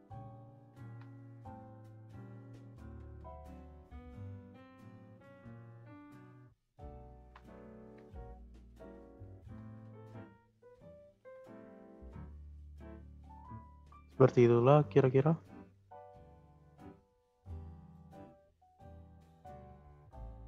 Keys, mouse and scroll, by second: 0.6 r, 2.7-3.0 drag, 3.0 space, 3.7 space, 4.2-7.0 drag, 7.0 r, 11.7-12.0 drag, 12.0 space, 12.7 space, 13.1-14.9 drag, 14.9 space, 16.1 space, 16.8 click, 17.4 space, 19.2 space, 19.9-20.4 drag.